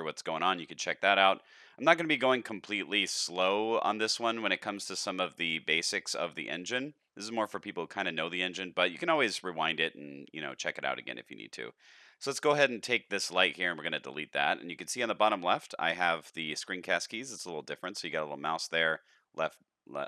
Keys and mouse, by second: 1.4-1.8 shift+middle drag, 2.2-2.6 middle drag, 2.9-3.2 shift+middle drag, 3.6 middle click, 4.1 shift+middle drag, 4.6 middle click, 5.2 shift+middle drag, 6.0 shift+middle click, 6.5 middle click, 7.2 middle click, 7.9 middle click, 13.6 x, 18.6 click.